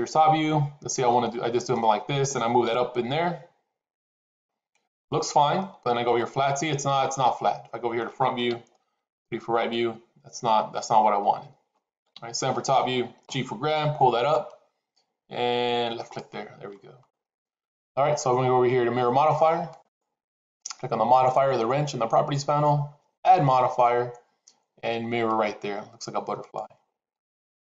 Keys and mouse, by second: 0.9 middle click, 2.5 g, 5.4-7.9 middle drag, 8.4 KP_1, 8.8 KP_3, 11.1 ctrl+z, 12.0 KP_7, 13.2 g, 19.7 click, 23.1-26.5 drag.